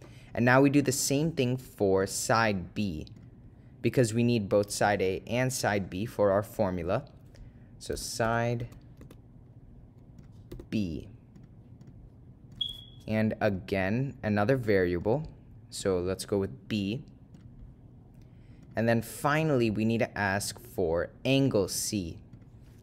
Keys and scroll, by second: 2.1 Right, 3.3 Return, 10.4 0, 11.5 ., 12.0 0, 14.4 ,, 17.5 Return, 19.5 Right, 20.6 Return.